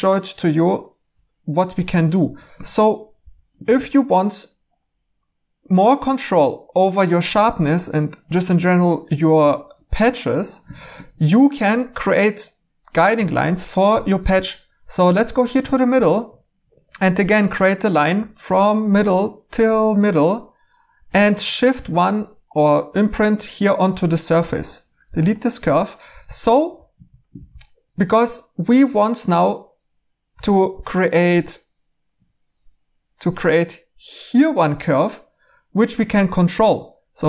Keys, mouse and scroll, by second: 2.5 Tab, 3.1 h, 3.6 e, 15.9 a, 21.7 !, 24.6-25.0 typing, 26.1-26.7 typing, 28.7 2.